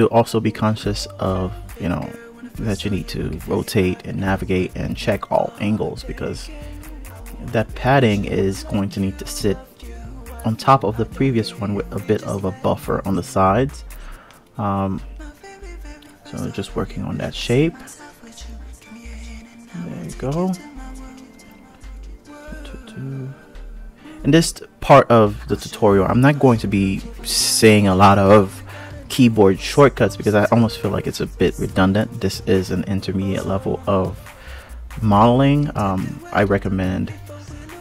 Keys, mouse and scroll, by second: 1.0 s, 3.1 click, 4.0 click, 4.8 s, 7.3-7.7 scroll down 1, 7.7-8.5 scroll up 1, 8.5-9.1 scroll down 1, 9.1 click, 10.1 click, 10.9 click, 11.8 s, 15.4 click, 16.2 g, 18.8 click, 19.2 g, 21.0 click, 22.1 alt+click, 23.3 alt+shift+click, 24.4 alt+shift+click, 25.6 alt+shift+click, 26.5 click, 27.7 KP_1, 28.2 KP_3, 29.7 2, 31.0 e, 37.7 click.